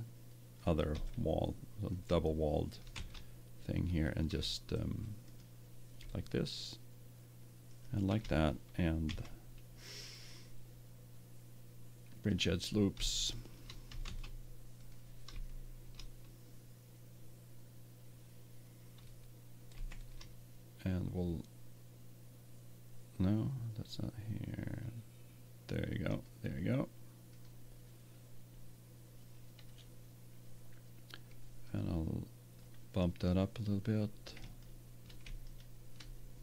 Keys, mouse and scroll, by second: 0.6 click, 2.2 middle click, 2.9 ctrl+Tab, 3.0 middle click, 5.2 right click, 6.4 right click, 7.7-9.2 right drag, 9.0 w, 13.0 middle click, 14.0 ctrl+Tab, 19.7 ctrl+r, 27.4-29.1 drag, 29.1-30.5 middle drag, 31.6-33.5 drag, 34.4-36.4 right drag.